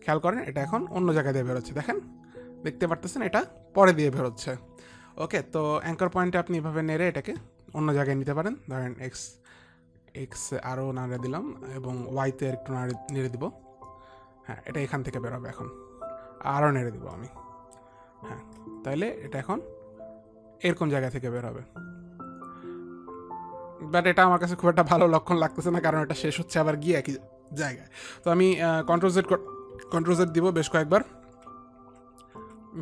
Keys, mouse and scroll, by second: 2.6 click, 6.6 click, 8.8 click, 10.9 click, 13.6 click, 17.6 click, 19.1 click, 29.5 ctrl+z, 30.2 ctrl+z, 30.8 ctrl+z, 31.3 ctrl+z.